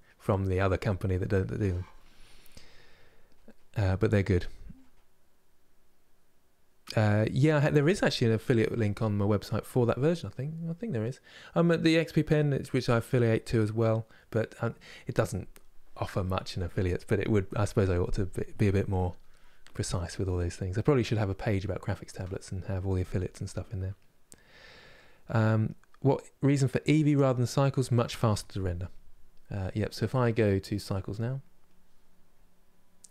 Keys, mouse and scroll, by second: 30.2-33.1 drag.